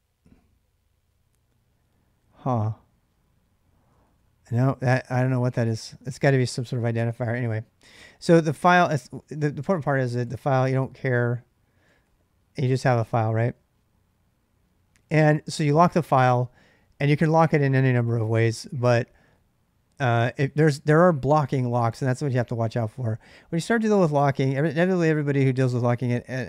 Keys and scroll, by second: 3.8 ctrl+a, 4.0 ctrl+a, 6.4-7.3 typing, 8.7 ctrl+[, 8.9 k, 9.1 k, 10.0 k, 11.6 x, 11.8 x, 12.4 Return.